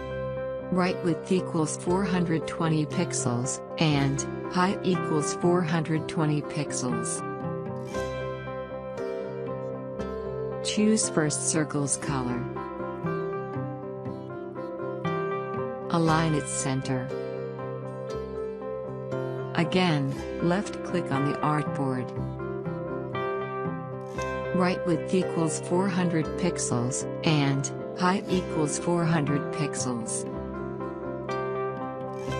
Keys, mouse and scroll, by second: 1.8 4, 4.0-5.1 typing, 6.2 Tab, 8.2-11.0 drag, 25.2 4, 26.4-26.8 typing, 28.9 Tab, 30.6 click.